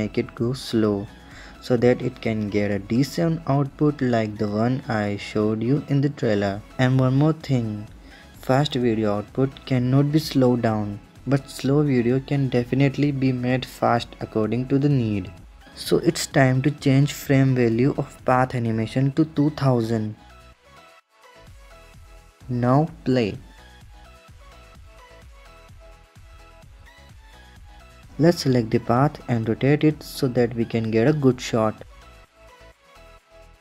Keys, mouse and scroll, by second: 5.6 space, 7.3 space, 8.2 space, 8.8-11.8 drag, 15.3-16.2 drag, 16.2-17.1 scroll down 9, 17.1 scroll down 1, 17.3-20.0 drag, 20.0 KP_0, 21.2 KP_0, 22.6-24.6 drag, 27.5-29.5 drag, 29.5 r.